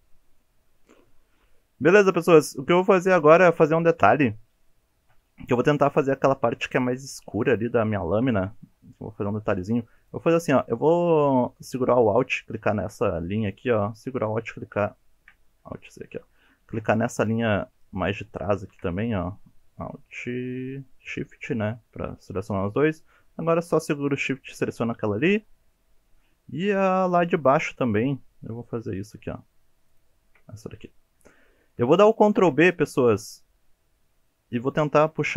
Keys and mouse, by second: 0.5 click, 0.7 shift+middle click, 1.1 shift+middle click, 2.0 middle click, 2.9 shift+middle click, 4.0 KP_1, 5.0 alt+z, 7.9 shift+click, 15.1 ctrl+z, 15.8 ctrl+z, 16.9 middle click, 18.5 shift+middle click, 21.4 alt+shift+click, 25.7 shift+middle click, 26.2 shift+middle click, 27.1 middle click, 28.7-29.1 shift+middle drag, 31.2 shift+click, 32.3 ctrl+b.